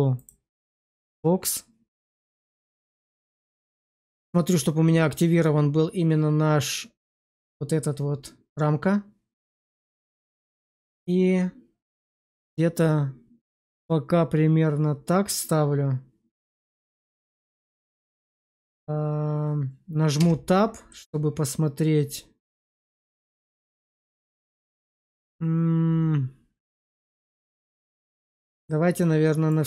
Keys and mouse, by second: 2.1 shift+middle drag, 9.5 click, 20.1 Tab, 20.8 middle click.